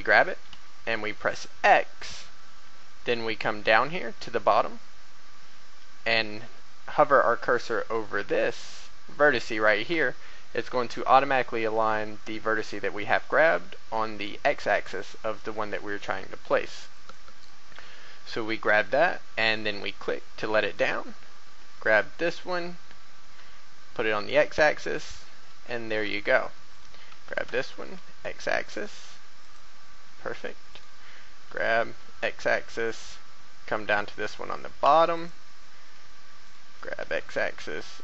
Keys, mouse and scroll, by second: 0.5 x, 4.7 typing, 14.7 typing, 16.9 click, 20.7 right click, 21.7 typing, 23.2 x, 24.9 click, 26.7 right click, 27.1 g, 27.8 x, 29.4 click, 30.7 right click, 31.1 g, 31.8 x, 35.1 click, 36.4 right click, 36.7 g, 37.0 x.